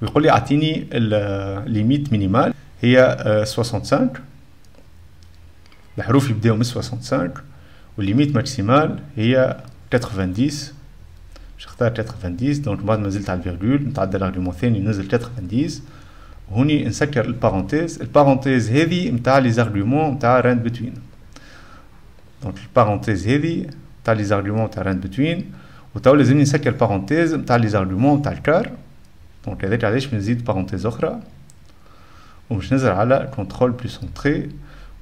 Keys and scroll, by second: 2.7-6.4 typing, 9.7-13.6 typing, 15.2 0, 16.7-17.6 typing, 29.9 F10, 30.0 -, 31.0-32.0 typing, 34.2 ctrl+Return.